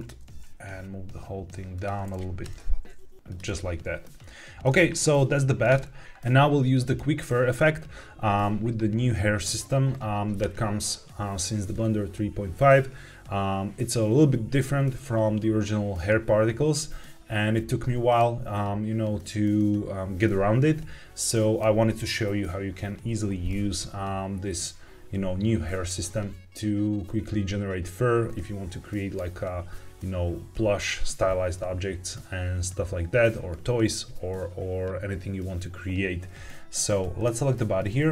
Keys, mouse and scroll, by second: 0.2 g, 0.3 z, 1.7 click, 2.3 KP_1, 3.2 click, 3.5-4.5 shift+middle drag, 37.1 click.